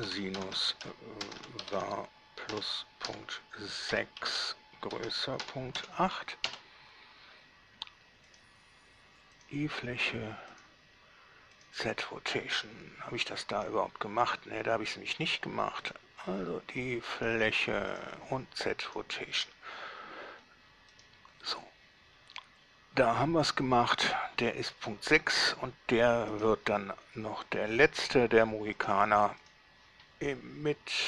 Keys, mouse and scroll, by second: 0.0-2.0 typing, 3.3-6.0 typing, 6.7 Return, 8.5 click, 9.6 click, 10.7 click, 11.8 click, 13.7 middle click, 16.1 click, 17.4 click, 18.1 click, 19.1 click, 20.1-20.7 scroll down 1, 21.1 right click, 26.6 right click, 29.0 click, 29.7 click.